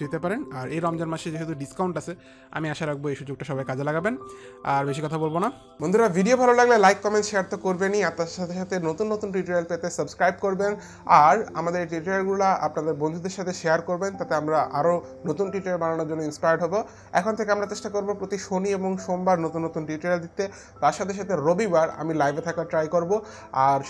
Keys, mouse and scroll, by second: 0.8 KP_2, 1.1 click, 1.1 KP_0, 1.1 KP_2, 1.6 Return, 3.5 Return, 3.5 click, 3.5 KP_0, 3.5 KP_2.